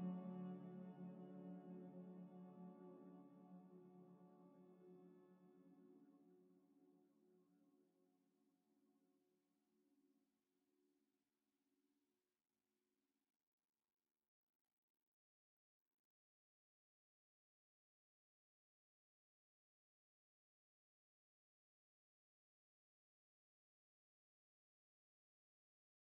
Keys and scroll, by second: 0.5 typing, 1.9-6.7 typing, 7.9-8.6 typing, 9.9 z, 14.0 Delete, 17.6 g, 19.7 Escape, 20.1 a, 20.7 z, 22.6 ctrl+c, 22.7 ctrl+v.